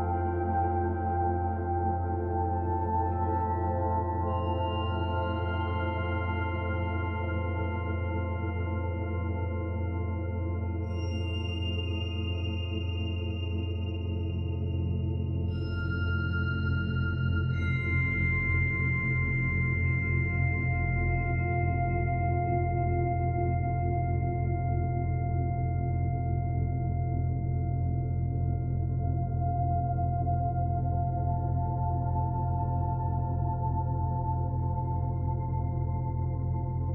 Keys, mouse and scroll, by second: 1.2 middle click, 2.0 middle click, 3.6 click, 5.2 middle click, 6.7 s, 8.9 middle click, 12.7 click, 20.2 middle click, 21.7-22.8 scroll up 1, 22.8 click, 22.8-23.3 scroll up 2, 24.2 click, 27.3 click, 29.7 click, 33.9 middle click, 35.8 click.